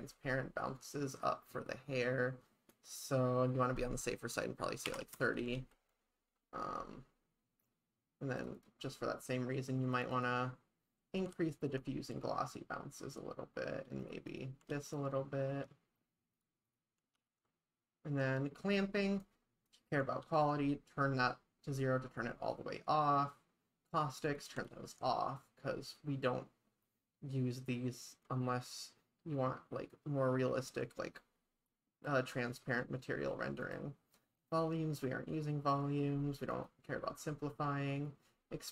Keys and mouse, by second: 2.7-6.0 drag, 5.5 ctrl+s, 8.5 click, 9.9 click, 10.1 click, 11.3 ctrl+s, 14.0 click, 14.3 click, 14.7 ctrl+s, 16.4 click, 16.7 click, 17.1 ctrl+s, 19.2 click, 20.2 ctrl+s, 23.9 click, 24.2 click, 24.7 ctrl+s, 33.6 click, 34.5 click, 36.6 click.